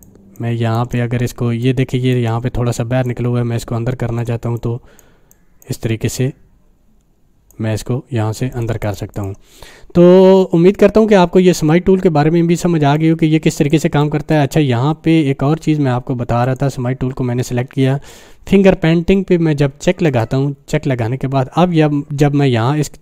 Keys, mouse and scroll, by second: 0.3-1.0 click, 1.6 click, 1.9 space, 3.0-4.3 drag, 5.5-6.7 drag, 8.8 right click, 9.3 click, 12.9 click, 13.0-13.9 click, 14.2 click, 16.4 click, 20.1 click.